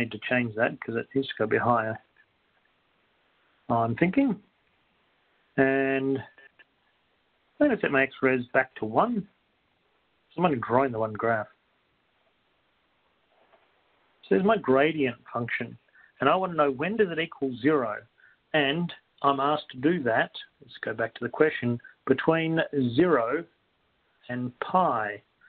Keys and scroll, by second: 0.7-1.8 typing, 1.1 Down, 2.4 Right, 4.2 4, 6.7 Down, 8.7 1, 13.0-13.8 typing.